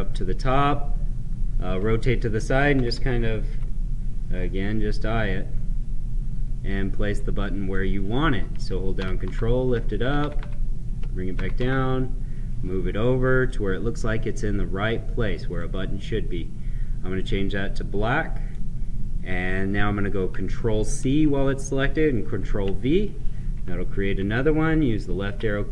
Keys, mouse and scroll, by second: 2.6 Right, 4.3-4.7 scroll up 1, 5.0-9.0 right drag, 9.0 ctrl+Up, 10.1 ctrl+Down, 11.3 BackSpace, 13.4 click, 17.2-20.9 right drag, 20.9 ctrl+c, 22.1 ctrl+v.